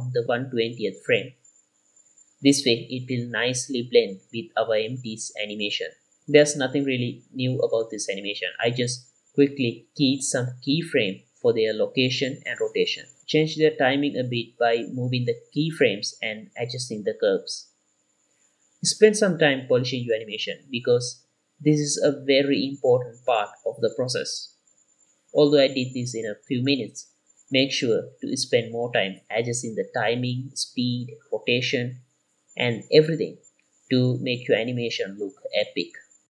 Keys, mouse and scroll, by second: 0.0-1.4 typing, 0.0 scroll up 1, 0.3 click, 0.7 click, 1.7 click, 1.9 click, 5.5 i, 5.7 click, 5.8 click, 7.1 click, 8.8 space, 9.0 click, 9.2 click, 9.6 click, 9.8 space, 10.1 Right, 10.5 click, 11.7-13.4 drag, 13.4 r, 13.8 i, 14.0-15.3 drag, 15.4 x, 15.6 drag, 19.2 space, 19.6 space, 19.8 click, 20.3 space, 20.4 click, 20.6 click, 21.3 space, 21.6 click, 23.0-23.3 scroll up 6, 23.1 shift+middle click, 23.2 shift+middle drag, 23.3 middle drag, 24.0-26.4 drag, 26.7 i, 27.5-28.6 drag, 28.8 drag, 29.3 r, 29.4 y, 30.4 click, 30.7 i, 30.9 click, 31.5 click, 31.6 i, 31.9 click, 32.6 i, 32.9 r, 33.1 click, 33.1 y, 33.2 i, 33.4 click, 34.3-36.2 typing, 34.4 click, 34.9 click, 35.1 click, 35.2 scroll down 3, 35.7 click, 35.9 click.